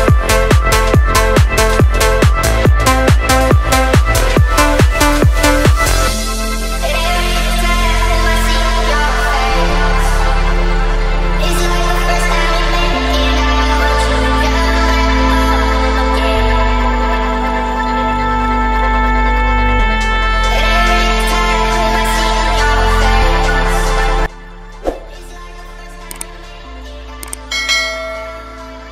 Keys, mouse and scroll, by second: 1.2 middle click, 2.0 middle click, 3.1-4.8 drag, 5.7 click, 8.4 click, 9.1-9.8 scroll up 2, 9.8-10.2 scroll up 1, 11.1 click, 11.6 click, 15.1-17.1 drag, 17.5-17.8 scroll down 1, 18.2 scroll up 1, 19.3 click, 21.4 click, 21.9 space.